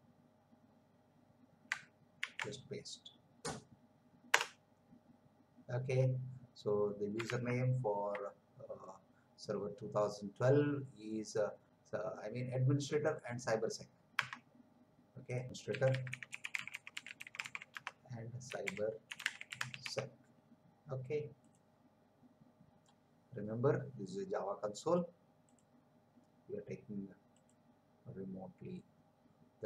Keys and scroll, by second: 2.2 ctrl+v, 4.3 Return, 7.5 alt+Tab, 14.2 Tab, 15.4-20.3 typing.